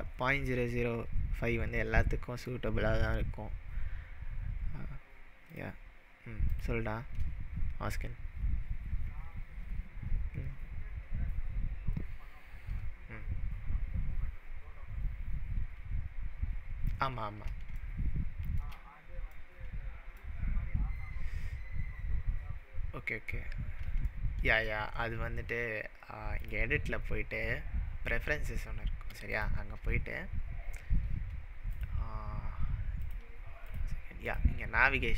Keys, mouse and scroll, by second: 2.1-3.2 middle drag, 3.0-4.3 scroll up 3, 5.5 click, 6.5 click, 17.8-18.6 shift+middle drag, 21.7-23.8 scroll down 3, 24.2-24.6 shift+middle drag, 26.4-29.6 drag.